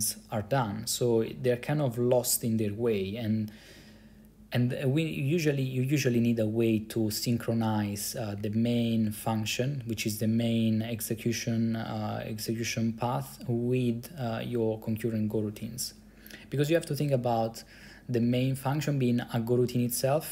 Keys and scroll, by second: 8.5 Up, 8.6 Up, 8.8 Up, 8.9 Up, 9.0 Up, 9.2 Up, 9.3 Up, 18.3 Left, 18.5 Left, 18.6 Left.